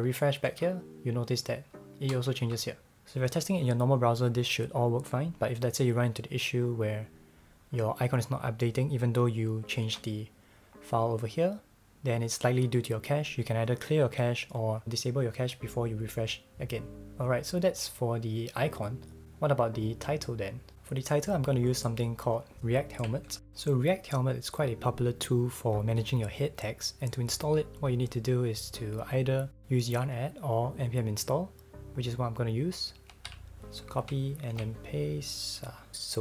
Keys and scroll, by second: 0.5 super+r, 9.8 super+w, 30.7 super+v, 32.2 super+b, 34.0 super+b.